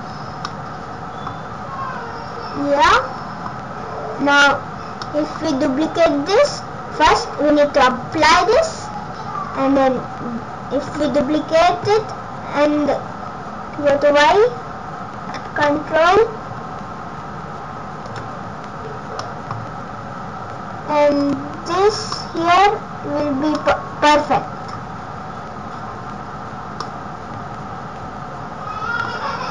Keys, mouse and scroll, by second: 0.2 scroll down 2, 0.5 middle click, 1.4-1.9 scroll up 7, 2.1 scroll down 2, 2.9 middle click, 3.6 scroll down 2, 4.2 scroll up 1, 4.7-5.0 scroll up 1, 5.0 middle click, 5.5-6.0 scroll down 4, 8.2 click, 9.5-9.9 scroll up 1, 10.9 shift+d, 18.5 scroll up 1, 19.2 middle click, 19.6-20.0 scroll down 3, 19.9-20.5 scroll up 4, 21.2 click, 21.6-21.9 scroll up 2, 22.2 middle click, 22.5-23.1 scroll down 2, 23.5 scroll up 1, 23.6 middle click, 24.4 scroll down 2, 25.7-26.8 scroll up 5, 26.8 middle click, 29.2-29.5 scroll up 1.